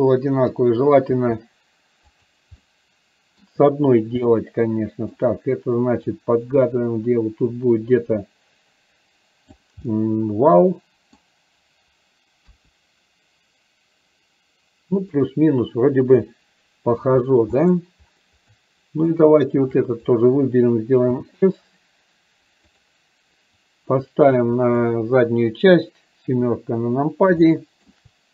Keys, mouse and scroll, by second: 2.7-3.4 middle drag, 4.4-5.2 middle drag, 6.3-9.7 drag, 10.1-11.3 middle drag, 15.3-17.1 middle drag, 17.1 scroll down 1, 17.7 middle click, 17.8 scroll down 1, 18.7-19.2 shift+middle drag, 19.9 click, 23.7-24.8 drag, 27.7-28.1 shift+middle drag.